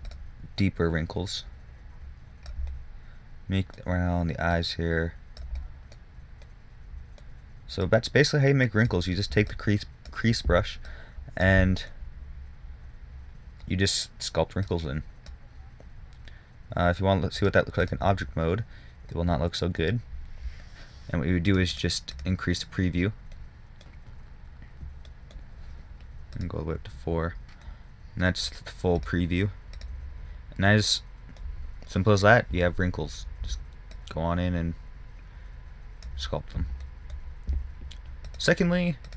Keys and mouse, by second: 1.0-3.0 drag, 3.3-3.7 middle drag, 4.1-4.9 middle drag, 4.9-6.8 drag, 6.8-8.1 middle drag, 8.1-16.8 drag, 17.7-19.7 drag, 19.7 middle drag, 21.8-23.9 drag, 23.9 middle click, 24.0-25.5 drag, 26.6-28.5 drag, 28.5 middle click, 28.6-29.6 drag, 30.5 click, 31.3-34.3 middle drag, 34.3-36.6 drag, 36.6-38.6 middle drag.